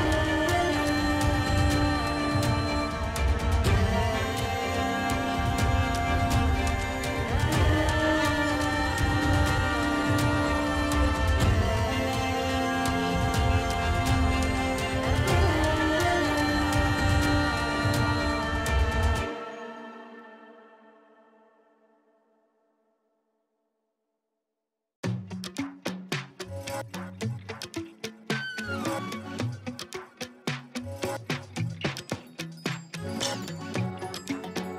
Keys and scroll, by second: 1.6 ctrl+alt+z, 3.1 ctrl+alt+z, 3.2 [, 7.4 space, 7.7 [, 14.4 space, 15.4 ctrl+alt+z, 15.4 [, 23.2 ], 24.6 space, 24.7 space, 25.5 ], 30.5 space, 32.2 space.